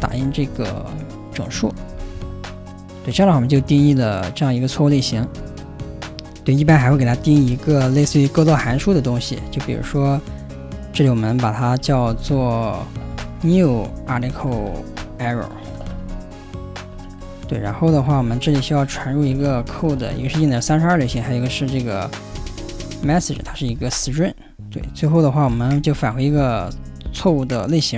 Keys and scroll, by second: 0.0-2.7 typing, 1.5 Return, 6.6-9.8 typing, 9.5 Escape, 11.6-24.0 typing, 24.0 ctrl+j, 25.2-27.7 typing.